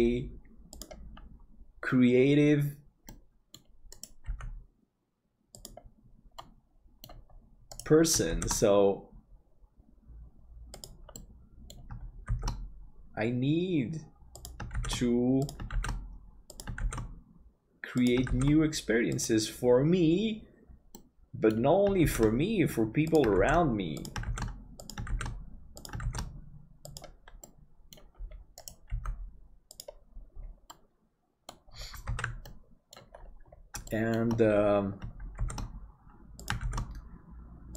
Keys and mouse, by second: 3.2 middle click, 4.3 g, 6.5 middle click, 8.3 shift+d, 11.2 middle click, 12.3 shift+d, 21.0 middle click, 22.1 shift+d, 27.6 middle click, 28.9 g, 30.8-31.8 middle drag, 32.5 ctrl+s, 32.5 middle click, 33.9 shift+middle click, 35.4 shift+d.